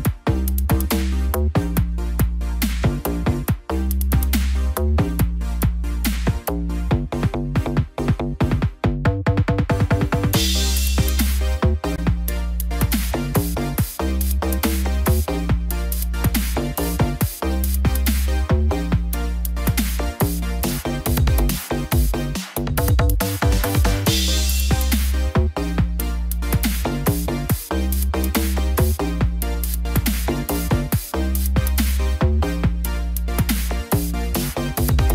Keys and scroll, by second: 5.8 ctrl+0, 17.5 ctrl+0, 23.3 shift+F5.